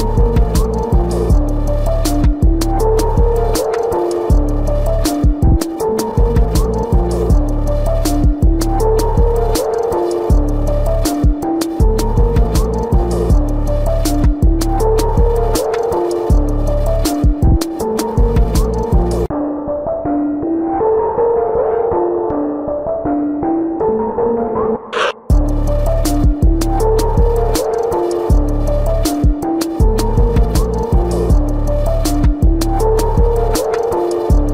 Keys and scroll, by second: 4.4 ctrl+-, 4.4 ctrl+=, 19.5 ctrl+alt+z, 20.5 ctrl+alt+z, 21.6 ctrl+alt+z, 22.9 ctrl+-, 26.9 space, 28.5 ctrl+alt+z, 34.2 ctrl+-.